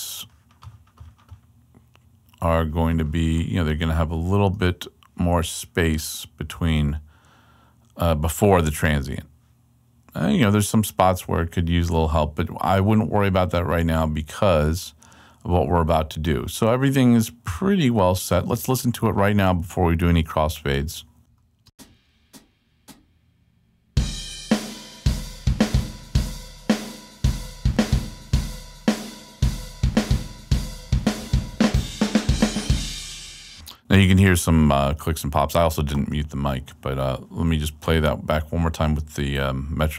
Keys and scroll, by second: 21.2 super+Return, 21.6 space, 33.4 space.